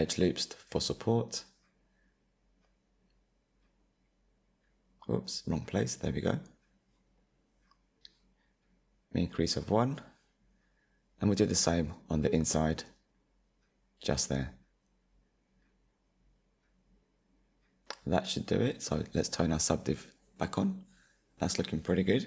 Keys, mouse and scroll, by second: 3.4-4.7 drag, 4.7 ctrl+r, 6.1 ctrl+z, 6.8 ctrl+r, 10.4 click, 11.3 middle click, 12.1-12.7 scroll up 2, 12.7-13.9 middle drag, 13.9 ctrl+r, 17.1 click, 17.9 Tab, 19.6 click, 20.3-20.8 scroll down 3, 20.8 click, 21.1-22.2 middle drag.